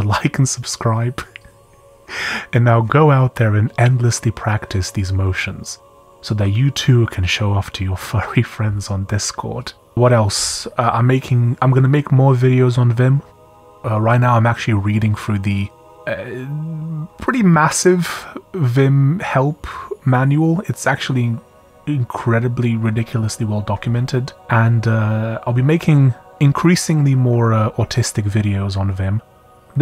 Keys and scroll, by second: 7.3 typing.